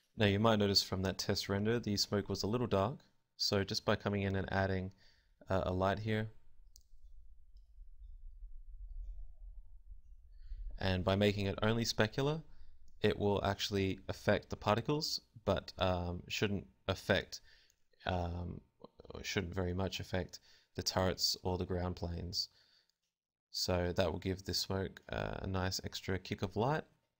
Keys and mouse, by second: 0.8 shift+a, 5.1 r, 5.8 click, 7.1-9.2 middle drag, 10.1 KP_0, 11.7 shift+a, 12.2 shift+a, 12.8 g, 13.2 g, 15.4 KP_0, 17.8 Escape, 25.6 Escape.